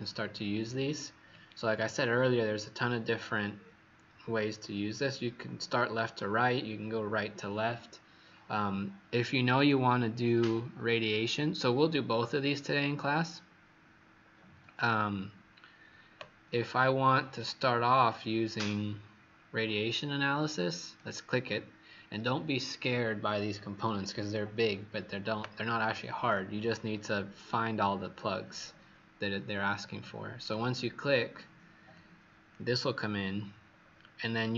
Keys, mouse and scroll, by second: 1.7 scroll down 1, 9.5 click, 27.7 scroll down 3, 28.6 scroll, 28.7 scroll up 1, 29.7-30.4 scroll up 2, 30.4 click, 31.2-31.9 scroll down 2, 31.9 click, 33.7-34.0 scroll up 4.